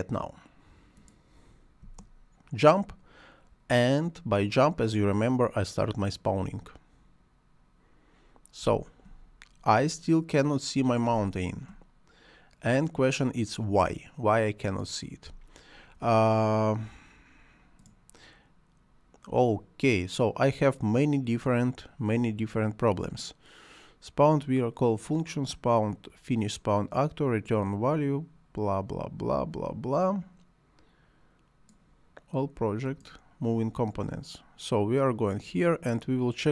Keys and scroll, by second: 1.8 space, 8.6 space, 15.3 space.